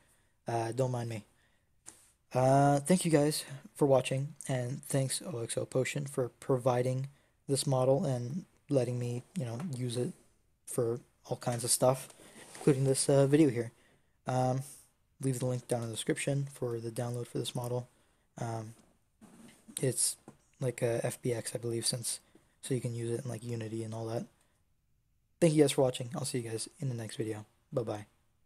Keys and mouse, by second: 3.9-21.0 drag.